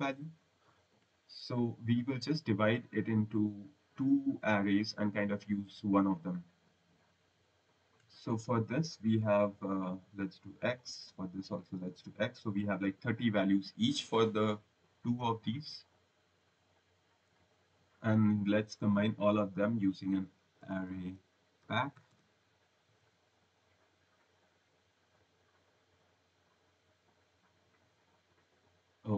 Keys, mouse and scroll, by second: 0.8 Delete, 1.6 click, 2.0 click, 6.1 click, 6.8 click, 7.7 click, 8.8-9.6 scroll, 9.6 click, 10.7 click, 11.7 click, 14.0 click, 15.2 click, 15.7 click, 16.3 click, 17.4 click, 18.6 click, 20.5-22.5 typing, 23.7 click, 25.1 click, 26.7 click, 27.7 click.